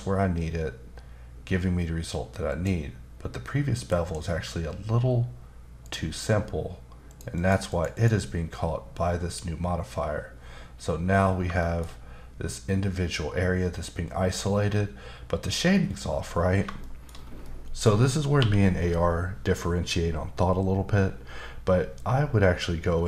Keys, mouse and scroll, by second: 2.5 click, 3.9 ctrl+shift+b, 5.8 shift+click, 7.1 shift+click, 7.4 shift+double click, 7.7 shift+click, 7.9 shift+double click, 11.3 shift+scroll down 2, 11.6 shift+middle click, 16.8 shift+double middle click, 17.1 scroll down 2, 17.4 middle click, 18.4 q.